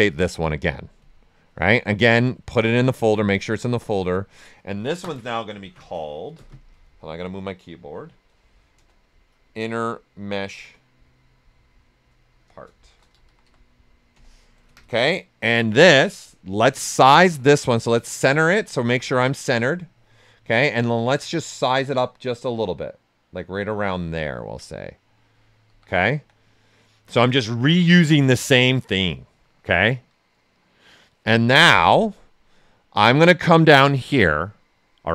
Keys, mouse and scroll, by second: 4.1 click, 6.9 Right, 10.5 space, 12.7-13.9 typing, 14.1 Return, 16.5 w, 18.0 click, 18.5 right click, 20.3 right click, 21.8-24.2 drag, 24.2 ctrl+right click, 25.7 shift+f, 26.1 q, 26.5-29.6 ctrl+right drag, 32.0-35.1 drag.